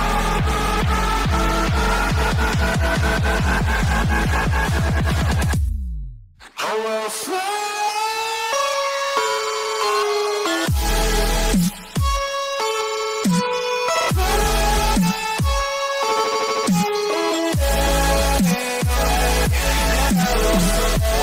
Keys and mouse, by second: 3.9-7.8 drag, 9.7 a, 10.2 a, 11.4-15.3 middle drag, 16.5-20.3 middle drag.